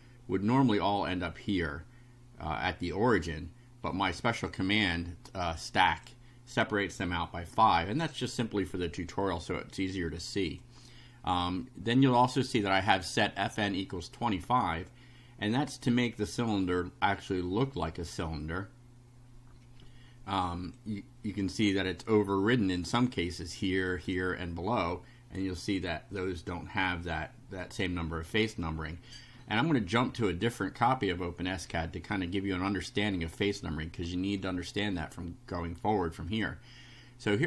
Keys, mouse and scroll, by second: 3.9 click, 5.6 click, 8.7-10.7 drag, 12.3-13.3 drag, 19.6-20.8 drag, 22.0 click, 23.6 click, 36.3 click.